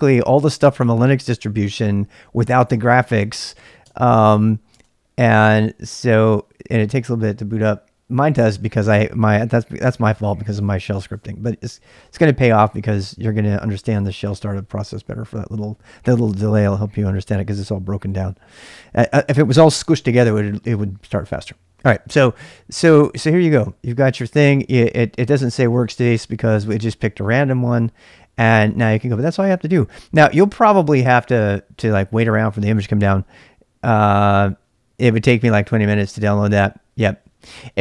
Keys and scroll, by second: 3.9 Return, 4.7 Return, 23.1-23.9 typing, 26.7 typing, 28.2-29.4 typing.